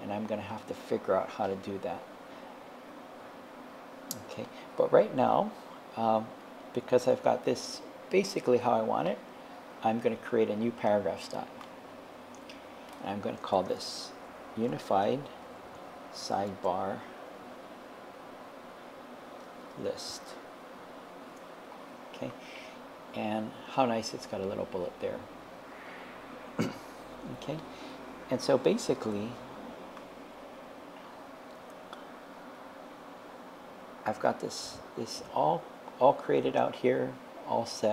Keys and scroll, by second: 13.3-16.5 typing, 19.4-20.4 typing, 21.3 Return.